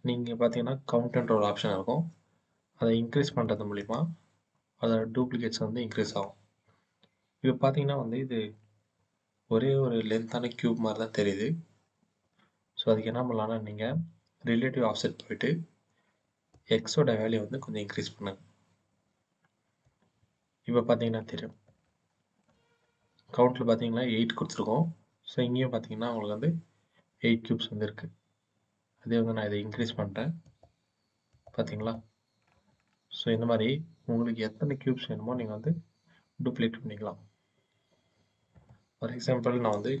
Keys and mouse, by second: 2.8 middle click, 3.3 middle click, 3.7 middle click, 4.9 middle click, 6.0-8.2 middle drag, 8.4 shift+drag, 8.6-9.5 shift+middle drag, 16.4-19.7 middle drag, 21.7-22.3 shift+middle drag, 29.7 click, 30.3 click, 31.2 click, 32.7-33.4 shift+middle drag, 38.5-40.0 middle drag.